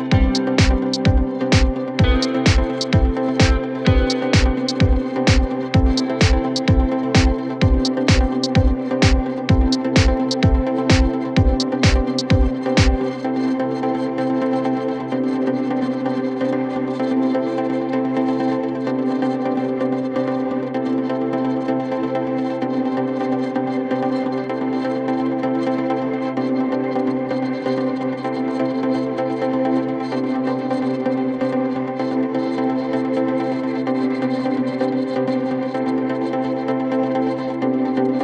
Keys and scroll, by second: 14.4 8, 14.5 Return, 15.1 ctrl+shift+q, 15.3 Escape, 16.7 Escape, 17.1 Delete, 33.9 Escape.